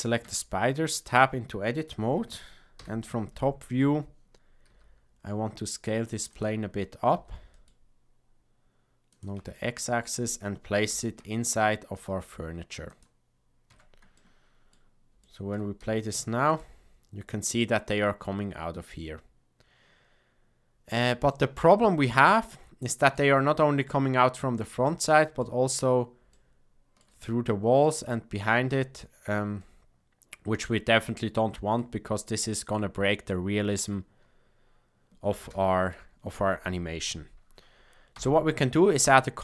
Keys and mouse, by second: 0.2 Tab, 2.7 KP_7, 4.7 s, 7.1 s, 9.5 shift+middle click, 10.8 g, 13.6 Tab, 14.1-14.7 middle drag, 15.2 shift+middle click, 15.7 space, 16.5 click, 21.4-22.1 middle drag, 22.3-23.2 shift+middle drag, 24.9-25.5 middle drag, 26.4-27.1 shift+middle drag, 27.3-27.9 middle drag, 29.6-31.9 middle drag, 33.3 shift+middle click, 35.5 space, 38.1 shift+Left, 39.0-39.4 middle drag.